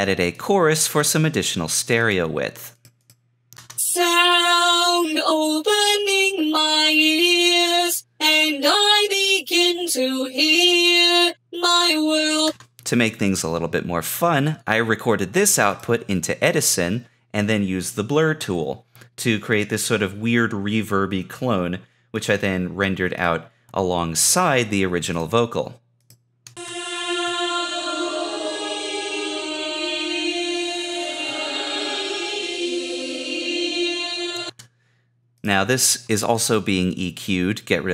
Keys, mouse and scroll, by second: 21.7 Escape.